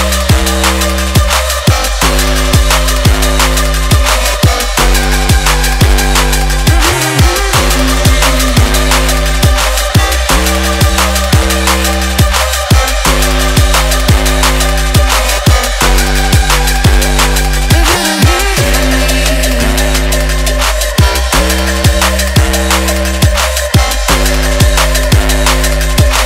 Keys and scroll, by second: 23.2 Up, 23.4 Down, 23.6 Up, 23.7 Right, 23.8 Right, 24.0 Right, 24.2 Right, 25.5 Return.